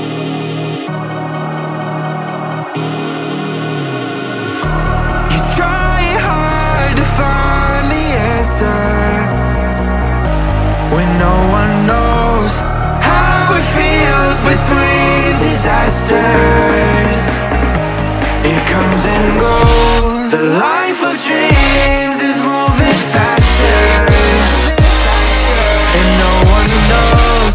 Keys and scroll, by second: 0.4-1.3 typing, 3.8 Up, 7.5 ctrl+c, 8.2 Tab, 11.3 ctrl+v, 16.7-17.6 typing, 21.1 Up, 21.7 Right, 23.2-24.2 typing, 27.2-27.5 typing.